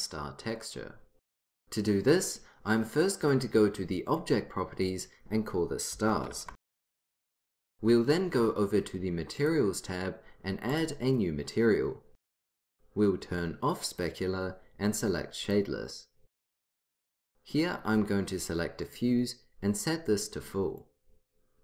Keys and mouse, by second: 4.2-6.9 drag, 7.5-8.9 drag, 9.5-11.1 drag.